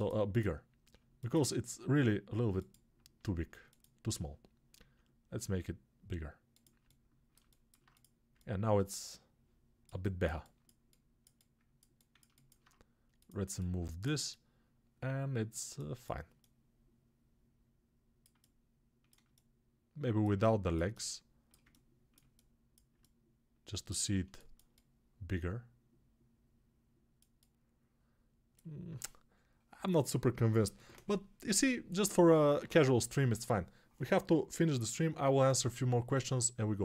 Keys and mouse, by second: 4.7 s, 12.4-36.8 alt+right drag.